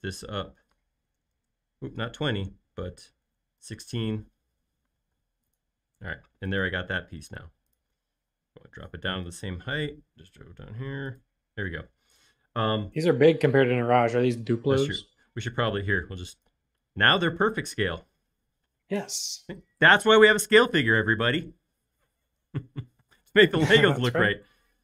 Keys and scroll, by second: 0.8-1.6 typing, 3.2-3.5 typing, 3.7 Return, 5.2 space, 8.3 m, 9.8 Up, 11.7 space, 15.5 e, 17.1-17.7 typing.